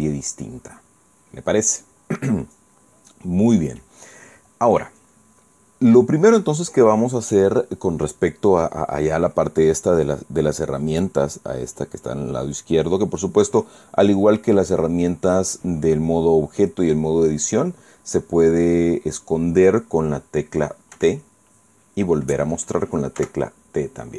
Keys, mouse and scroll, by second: 17.5 click, 21.6 t, 23.9 t.